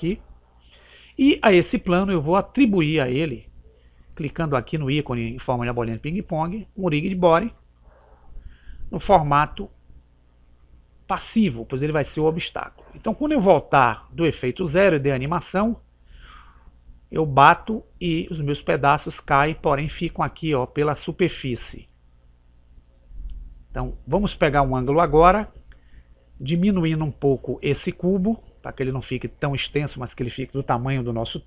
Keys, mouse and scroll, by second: 7.6 click, 10.4 click, 14.2 click, 21.0-22.7 middle drag, 28.7 click, 29.7-31.4 right drag.